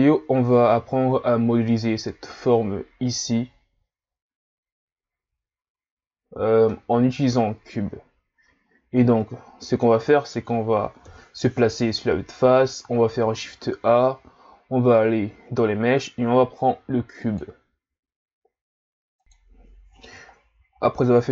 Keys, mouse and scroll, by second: 6.7-9.8 middle drag, 11.1 KP_1, 12.4 scroll down 2, 13.0 shift+a, 20.3-20.8 scroll down 2, 20.8-21.3 scroll up 4.